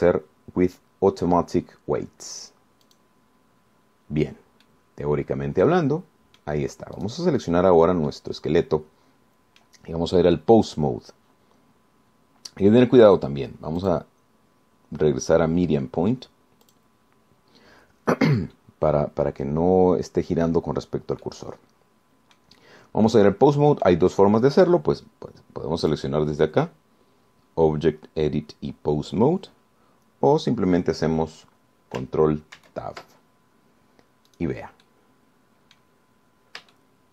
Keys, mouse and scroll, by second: 4.1 click, 5.9-7.8 drag, 8.2 click, 8.6 click, 9.3-11.0 middle drag, 15.0 click, 17.9 click, 22.5-23.8 drag, 24.5 click, 27.1 click, 33.8 ctrl+Tab, 35.5 click, 36.1-37.1 drag.